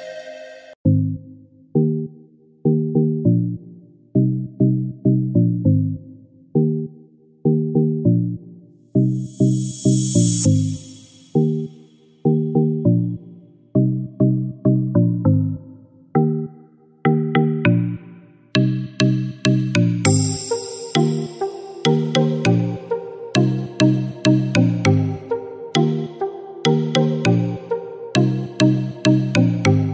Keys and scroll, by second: 13.3-15.6 typing, 16.9 typing, 18.3 typing, 21.1-21.5 typing, 25.5 typing, 29.3 typing.